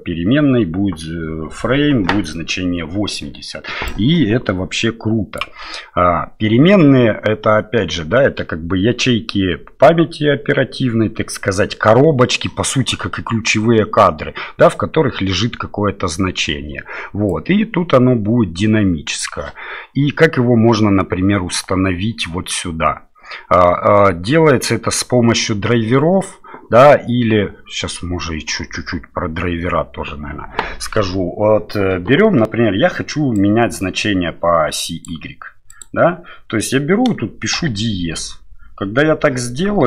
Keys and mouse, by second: 3.8-5.4 drag, 17.3-19.2 drag, 33.5-35.2 drag, 35.7-39.8 drag.